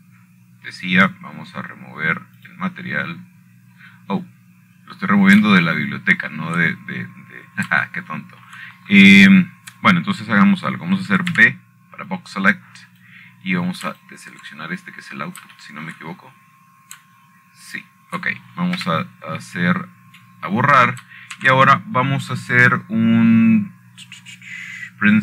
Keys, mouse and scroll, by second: 2.3 click, 5.1 click, 7.2-8.1 scroll down 2, 9.3 shift+middle click, 9.6 scroll down 1, 9.7 scroll up 1, 9.8-11.2 scroll down 5, 10.4 middle click, 11.2-12.2 shift+middle drag, 12.5 scroll up 2, 12.5 scroll down 2, 12.6 scroll up 1, 12.9 scroll down 2, 13.0-13.5 scroll up 1, 14.8 click, 16.6-17.2 shift+drag, 17.3 scroll up 2, 17.5 scroll down 2, 17.5-18.1 scroll up 4, 18.3-19.2 shift+middle drag, 18.9-19.5 scroll up 1, 20.4 shift+click, 21.5 Delete, 24.1 shift+a.